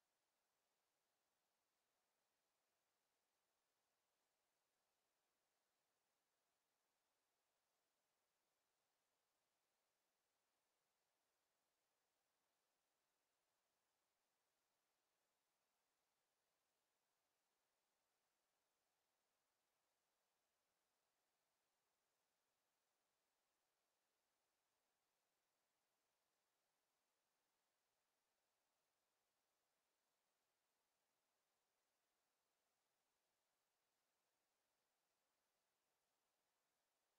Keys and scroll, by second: 1.4 w, 1.7 Escape, 29.8 Escape.